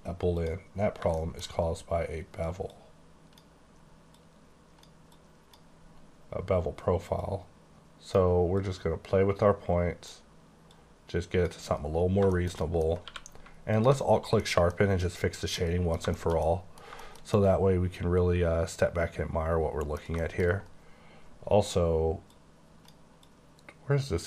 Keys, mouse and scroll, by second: 0.4 click, 1.0 shift+scroll down 1, 1.2 shift+middle click, 1.7 scroll up 2, 2.7 click, 4.1 click, 5.2 click, 7.2 click, 8.6 click, 10.7 click, 12.1 scroll down 2, 12.4 middle click, 12.6 double middle click, 13.1 q, 13.8 alt+click, 14.4 middle click, 14.8 middle click, 15.4 scroll down 1, 15.6 middle click, 15.9 middle click, 16.1 shift+middle click, 17.0 middle click, 17.4 double middle click, 20.2 shift+middle click, 22.3 click, 23.3 click.